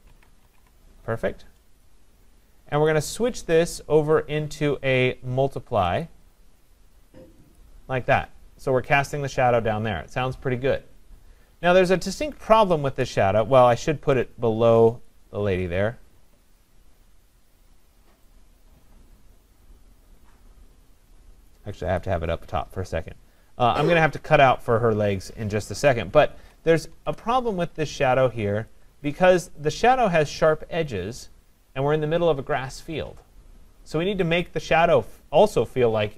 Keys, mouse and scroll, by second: 0.0-1.1 typing, 1.8 click, 2.5-3.2 typing, 2.9 click, 6.1 click, 7.6 click, 15.1 click, 16.2-20.1 drag, 22.0-26.6 drag, 26.4 ctrl+=, 26.9 ctrl+=, 27.7-28.0 scroll, 28.2-29.5 scroll, 28.7 click, 29.5-30.9 scroll.